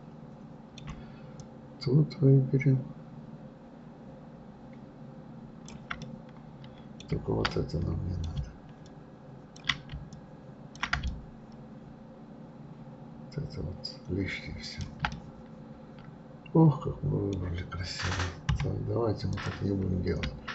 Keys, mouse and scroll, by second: 1.4-4.4 shift+drag, 6.0-8.9 middle drag, 8.9-14.1 ctrl+drag, 15.1-18.1 middle drag, 18.5 KP_3, 19.3 click.